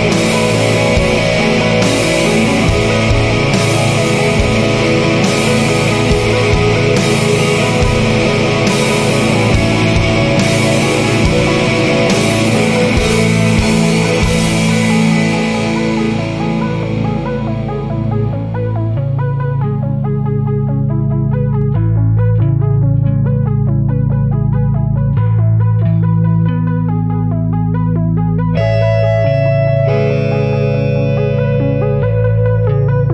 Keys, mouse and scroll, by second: 0.0-2.9 typing, 4.2 9, 4.5 0, 5.2 shift+0, 7.1 Return, 8.9 click, 10.7-12.4 drag, 14.6 click, 15.5 click, 17.0 click, 18.7-19.3 scroll down 2, 19.4-19.7 scroll up 2, 20.1-20.5 scroll down 2, 20.9-23.3 scroll up 10, 23.9-26.1 scroll down 12, 26.9-27.5 scroll up 2, 28.6 click, 30.5 click, 33.0 click.